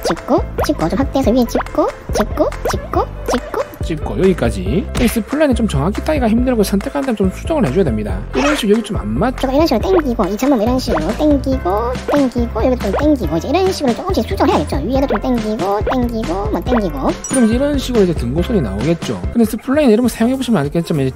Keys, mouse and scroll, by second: 0.1 click, 0.7 click, 1.0 scroll up 1, 1.6 click, 2.3 click, 2.8 click, 3.4 click, 4.0 click, 4.2 right click, 7.4 click, 8.7 scroll up 1, 8.8 middle click, 9.8 click, 10.2 click, 10.7 click, 11.3 click, 11.9 click, 12.2 click, 13.0 click, 13.4 click, 13.7 middle click, 15.1 click, 15.5 click, 15.8 click, 16.2 click, 16.7 click, 17.1 click, 17.7 scroll down 2, 18.4 middle click.